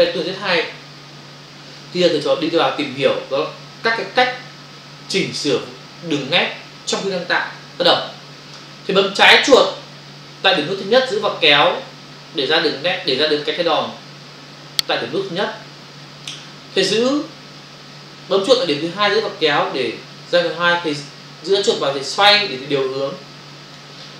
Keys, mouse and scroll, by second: 10.5 click, 19.0 click.